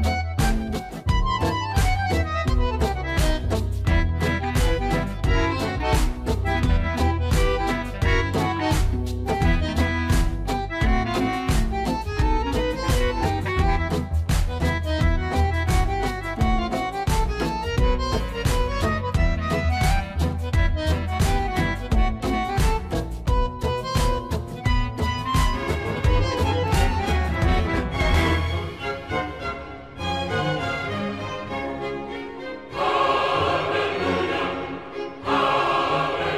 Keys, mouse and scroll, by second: 1.2-8.4 middle drag, 8.4 e, 9.9 y, 21.9 click, 22.7-30.9 middle drag, 30.9 click, 33.4 shift+Num_Lock, 33.4 click.